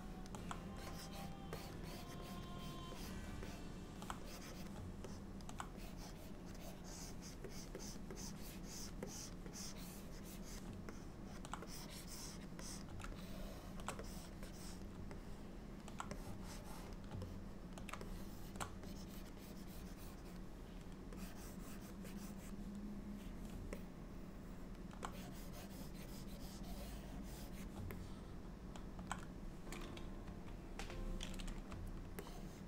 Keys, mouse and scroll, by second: 0.9 click, 1.6 click, 1.9 click, 2.3 click, 2.7 click, 3.0 click, 3.5 middle click, 4.3 click, 4.6 click, 5.2 middle click, 5.9 click, 6.6 click, 6.7 click, 7.6 click, 7.9 click, 8.2 click, 8.5 click, 9.1 click, 9.6 click, 10.3 click, 11.0 middle click, 11.7 click, 12.7 click, 13.2 shift+middle click, 14.1 click, 14.6 click, 15.2 middle click, 16.3 click, 17.3 middle click, 18.1 shift+middle click, 18.9 click, 19.5 click, 19.7 click, 20.1 click, 21.3 click, 22.1 click, 23.8 alt+middle click, 25.5 click, 28.0 alt+middle click, 30.3 KP_1, 32.3 shift+middle click.